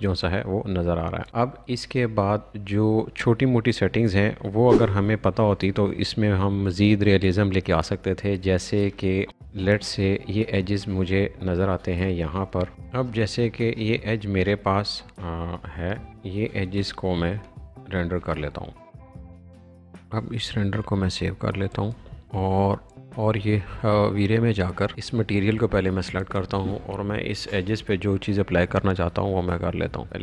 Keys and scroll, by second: 27.6 b.